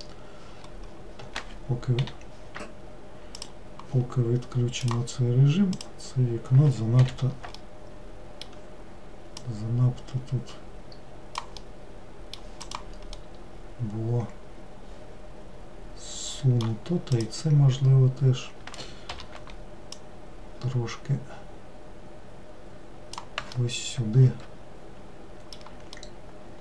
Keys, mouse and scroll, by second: 2.1 o, 3.4-5.9 drag, 7.1 l, 7.7-9.5 middle drag, 9.5 click, 11.7-12.7 middle drag, 12.7 click, 13.2-16.4 middle drag, 17.2 click, 19.2 l, 20.0 click, 23.6-26.6 middle drag.